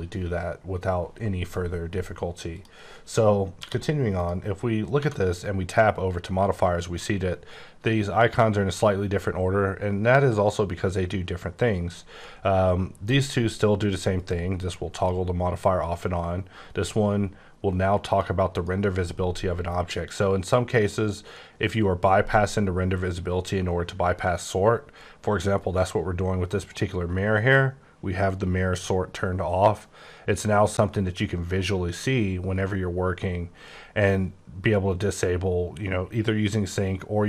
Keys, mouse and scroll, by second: 2.5 click, 3.6 q, 4.1 click, 5.0 Tab, 13.8 click, 14.2 click, 14.6 click, 14.9 click, 18.0 click, 18.5 click, 31.8-33.1 scroll up 14, 33.2-35.4 scroll down 10.